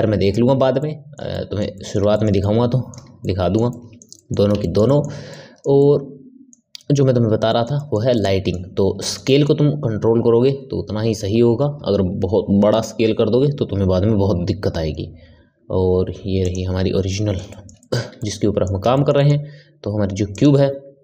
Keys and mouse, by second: 0.8-12.4 middle drag, 17.1-20.3 middle drag, 20.3 click.